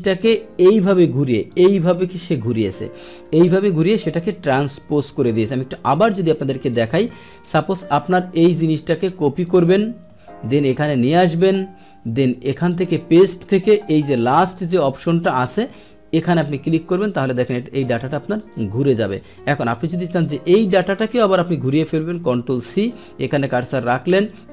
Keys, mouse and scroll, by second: 1.5-2.7 drag, 3.0-3.5 scroll down 1, 4.3 click, 5.0 click, 5.7 ctrl+z, 5.7 click, 6.6 click, 7.0-8.6 middle drag, 8.6 click, 9.9 ctrl+c, 11.2 click, 12.5 click, 16.1 click, 18.4 click, 19.8-21.6 drag, 22.9 click, 24.1 click.